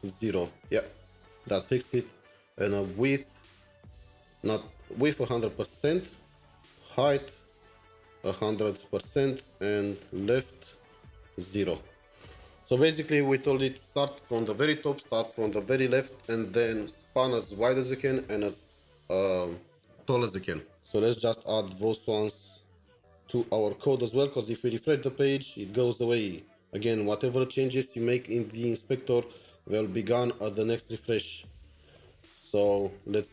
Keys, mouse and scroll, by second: 0.0-0.5 typing, 1.9 Return, 2.6-3.7 typing, 3.7 Return, 4.8-11.6 typing, 6.4 Return, 7.5 Tab, 11.7 Return, 23.1 Return, 23.2-24.0 typing, 24.6 ctrl+r, 29.6 ctrl+r, 30.1 typing, 31.9 shift+click, 32.4 shift+Tab.